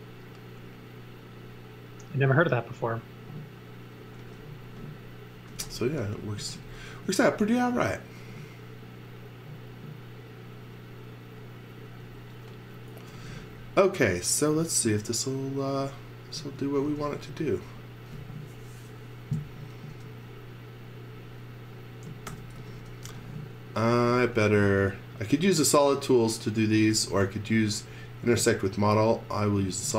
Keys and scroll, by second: 5.1-6.9 typing, 12.8-13.8 typing, 16.1-17.3 typing, 19.9 space, 22.0-24.6 typing, 26.6 x, 26.9 v, 28.3 space.